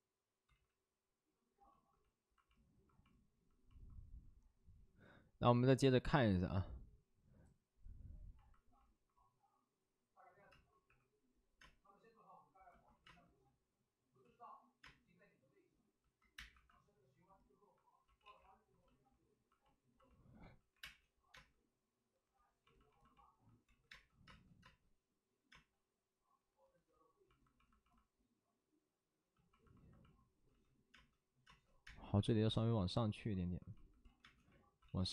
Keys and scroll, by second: 0.2 space, 0.4 ctrl+z, 0.4 space, 10.4 space, 10.8 3, 11.5 space, 12.8 ctrl+z, 13.0 space, 14.1 ctrl+z, 14.7 space, 16.4 1, 20.5 ctrl+z, 23.4 5, 23.4 space, 23.6 ctrl+z, 23.8 space, 29.4-32.0 typing, 30.4 ctrl+z, 34.0 ctrl+z, 34.1 space, 34.7 ctrl+z.